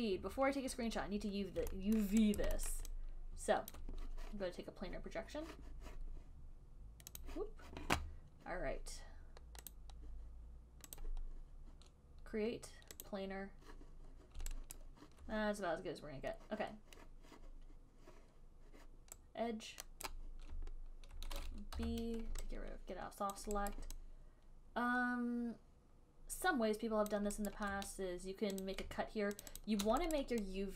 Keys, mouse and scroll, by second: 0.1 click, 2.3 alt+middle click, 2.7 alt+right click, 3.0 alt+middle click, 4.1 alt+click, 7.6 click, 10.0 click, 11.3 click, 13.3 click, 15.1 alt+right click, 20.4 right click, 22.1 b, 23.6 alt+click, 24.0 alt+click, 27.4 alt+click, 27.8 alt+click, 29.1 click, 29.8 shift+click, 30.0 shift+click, 30.5 alt+right click.